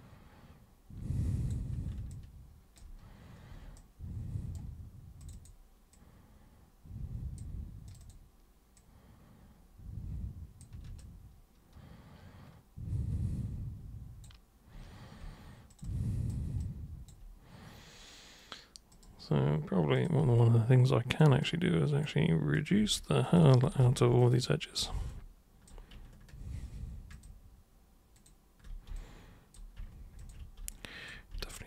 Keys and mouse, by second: 2.1-2.8 ctrl+shift+drag, 3.8 right click, 5.2 click, 5.9 click, 7.9 super+click, 8.1 super+click, 8.8-10.6 super+drag, 11.0-14.2 alt+super+drag, 15.7 alt+super+click, 15.9-16.3 alt+super+drag, 16.7 alt+super+click, 18.9 super+click, 20.0 super+click, 20.4 alt+super+click, 21.5 super+right click, 22.6 super+click, 23.3 ctrl+shift+super+click, 23.8 ctrl+super+z, 24.2 ctrl+shift+super+click, 25.1-25.7 alt+super+drag, 27.2 ctrl+shift+super+click, 28.2 ctrl+shift+super+click, 29.0-29.6 alt+super+drag, 30.2 ctrl+shift+super+click, 30.8 alt+super+click.